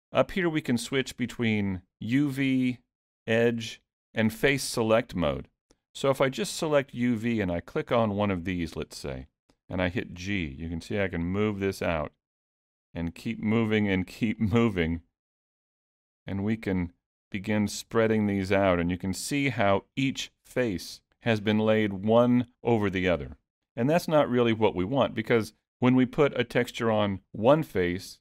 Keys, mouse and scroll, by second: 3.0 click, 4.0 click, 5.8 click, 7.3 click, 8.3 click, 9.7 g, 12.3 click, 13.2 g, 14.4 click, 14.7 g, 15.9 click, 16.2 g, 17.7 click, 18.1 g.